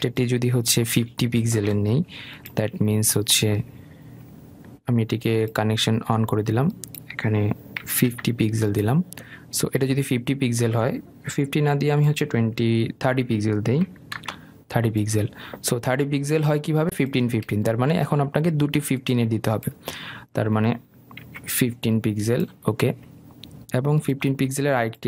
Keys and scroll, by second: 2.7 Delete, 12.1 Delete.